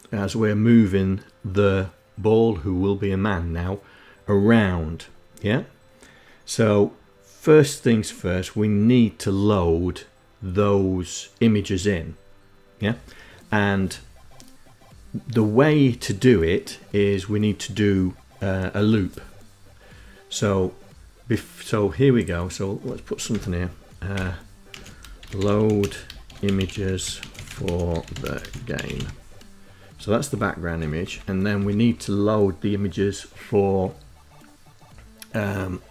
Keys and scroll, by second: 22.7 Return, 23.5-28.9 typing, 29.7 Down, 30.0 End, 30.5 Return, 30.9 Return.